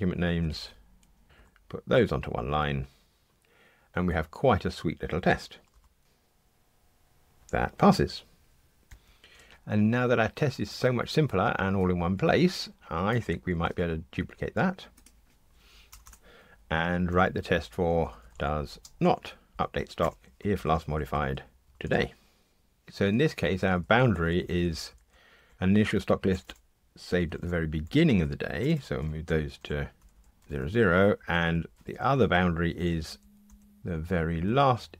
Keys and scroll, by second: 1.2 ctrl+shift+j, 5.7 ctrl+shift+r, 13.6 super+d, 21.7 alt+shift+Left.